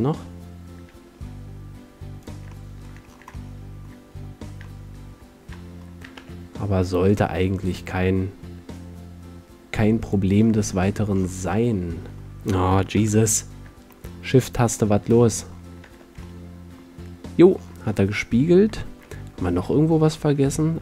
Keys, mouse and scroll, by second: 1.3 g, 2.4 click, 2.9-4.4 middle drag, 6.3 shift+d, 10.3 click, 11.0 middle click, 11.3 click, 11.5 middle click, 11.5 click, 12.0-13.6 middle drag, 13.0 KP_7, 14.1 middle click, 15.9 Tab, 19.9-20.8 middle drag.